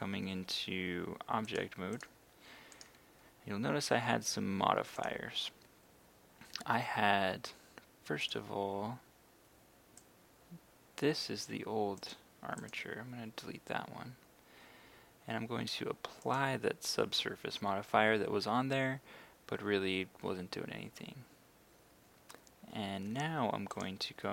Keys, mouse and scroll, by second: 1.5 click, 2.8 right click, 5.0-11.1 drag.